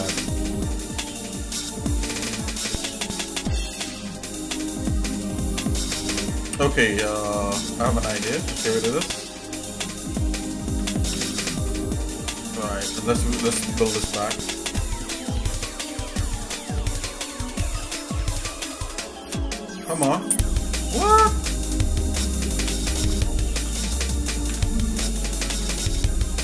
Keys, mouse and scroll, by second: 2.0 middle click, 2.4 middle click, 3.3 scroll up 1, 5.8 ctrl+Tab, 7.8 click, 9.2 ctrl+z, 10.3 click, 11.1 ctrl+x, 12.3 shift+middle click, 14.2 k, 21.4-24.6 shift+middle drag, 24.5 Escape, 25.4 ctrl+Tab.